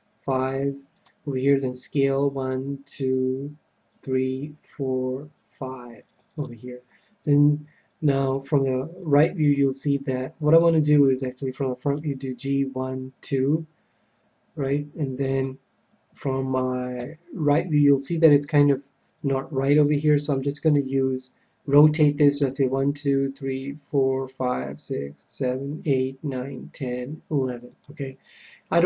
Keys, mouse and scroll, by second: 1.1-2.8 drag, 1.6 s, 6.4-8.2 drag, 8.5 KP_3, 10.5 KP_1, 11.9 g, 15.4-17.3 drag, 16.9 KP_3, 19.9 r, 27.8-28.8 drag.